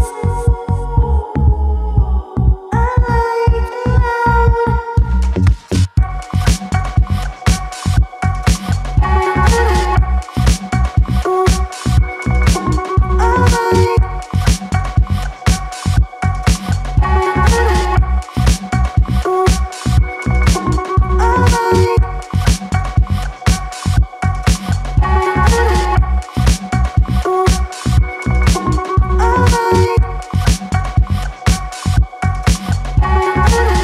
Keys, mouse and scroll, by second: 1.3 click, 1.9 e, 5.2 click, 5.5 f, 5.6 click, 5.7 scroll down 1, 5.9 alt+middle drag, 6.2 scroll up 1, 6.4 alt+middle drag, 6.7 click, 10.0 click, 10.3 f, 10.5 click, 11.1 click, 11.2-11.6 scroll down 1, 11.6 alt+middle click, 12.4 alt+click, 13.0 `, 13.6 click, 14.3 click, 14.7 ctrl+click, 15.3 ctrl+click, 15.6 ctrl+click, 16.0 ctrl+click, 17.0 ctrl+click, 18.6 alt+click, 19.5 click, 19.8 `, 20.1 scroll up 3, 20.2 alt+middle click, 20.4 click, 21.3 alt+middle click, 21.6 click, 23.2 ctrl+click, 23.5 f, 23.7 scroll down 1, 24.2 ctrl+z, 24.3 ctrl+z, 24.4 ctrl+z, 25.2 ctrl+click, 25.6 f, 25.8 alt+middle click, 26.0 click, 26.9 scroll down 1, 27.3-27.7 alt+scroll up 2, 27.3 alt+middle click, 27.7 alt+middle click, 28.0 click, 29.0 click, 29.8 click, 29.9-30.5 scroll down 1, 30.5 click, 31.4 shift+click, 31.7 shift+click, 32.0 shift+click, 32.3 shift+click, 32.7 shift+click, 33.2 alt+middle click, 33.5 shift+click.